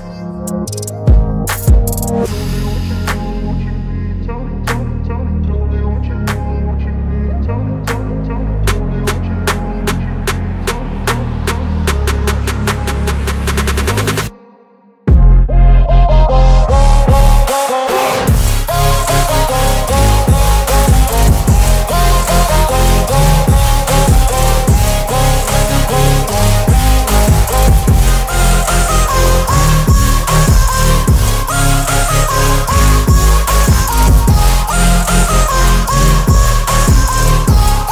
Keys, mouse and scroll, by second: 0.9 ctrl+g, 2.0 click, 3.4 shift+b, 4.6 shift+t, 5.0 Return, 9.4 Return, 9.5-14.1 shift+drag, 16.9 ctrl+g, 18.6 a, 19.9 click, 22.5 ctrl+d, 24.0 click.